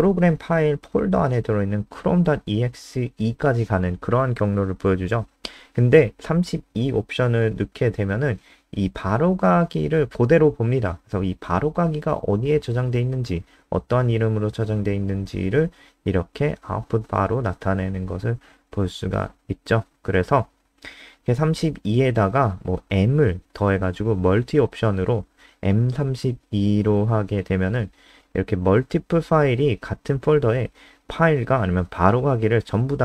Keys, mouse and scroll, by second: 5.6 BackSpace, 5.8 BackSpace, 6.1 ctrl+s, 7.7 F5, 10.5 click, 22.6 Right, 22.7 Right, 25.7 m, 27.2 ctrl+s, 27.5 F5, 29.4 click.